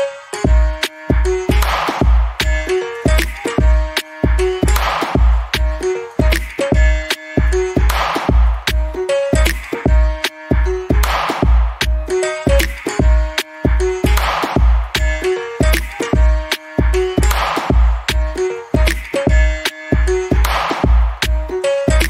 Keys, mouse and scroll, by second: 0.2 click, 3.0 click, 4.9 alt+middle click, 5.3 right click, 5.9 click, 7.1-7.5 scroll up 1, 7.5 alt+click, 7.9 alt+middle click, 8.3 alt+click, 13.4 click, 13.4 double click, 13.7 scroll down 1, 13.9 alt+click, 14.6 alt+scroll down 1, 14.8 alt+middle click, 15.2 alt+click, 15.5 alt+middle click, 15.9 alt+click, 16.8 alt+middle click, 18.9 click, 19.2 double click, 20.6 click, 20.8 double click.